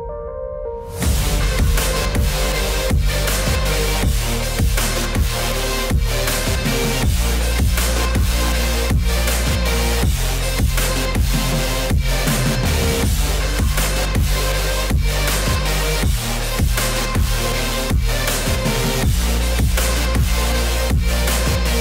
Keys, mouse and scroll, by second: 1.1 click, 2.7 click, 3.8 click, 8.6 click, 11.0 click, 12.4 click, 14.0 p, 16.0 click, 16.5 click, 17.2 ctrl+z, 17.7 click, 18.3 space, 18.4 click, 18.4 space, 19.0 click, 19.0 space, 19.3 click, 20.1 space, 20.2 click, 20.2 space, 20.5 click, 21.7 click.